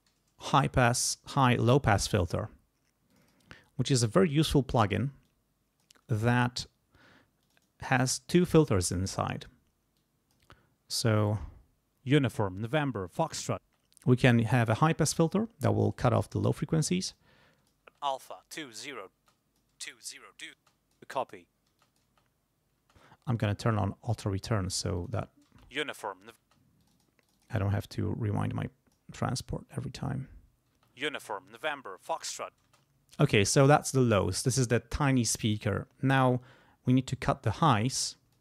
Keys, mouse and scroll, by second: 0.0-0.3 typing, 3.1 click, 4.0 click, 5.2 click, 7.4 click, 8.3 click, 9.9 click, 11.3 space, 13.6 space, 17.1 click, 17.8 space, 19.2 space, 19.2 click, 20.6 space, 20.6 click, 21.7 space, 21.8 click, 22.8 space, 24.1 click, 24.9 click, 25.4 space, 26.4 space, 26.8 click, 28.4 click, 30.7 space, 32.6 space, 37.6 click.